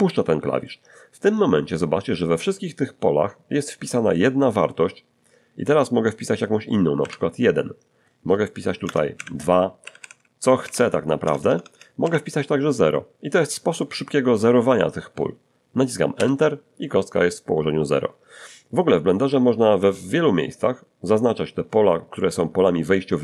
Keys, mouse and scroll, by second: 7.0 1, 8.8-12.0 typing, 16.2 Return.